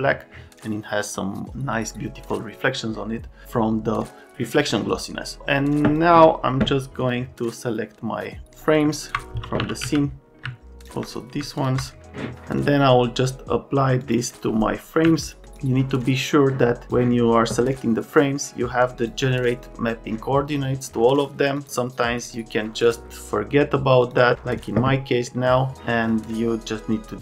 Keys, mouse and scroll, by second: 5.4 click, 9.3-10.3 typing.